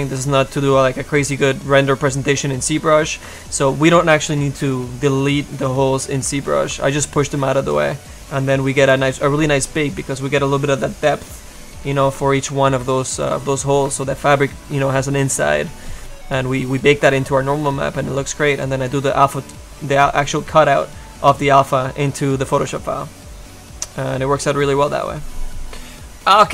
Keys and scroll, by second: 12.1 ctrl+z.